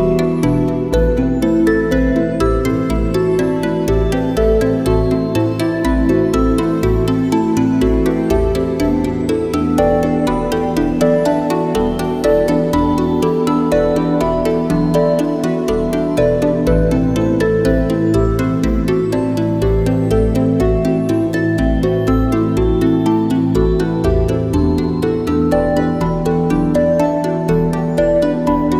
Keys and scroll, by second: 4.0 space, 13.1 space, 14.7 space, 16.3 `, 16.5 space, 23.2 ctrl+shift+a, 28.4 ctrl+shift+a, 28.5 space.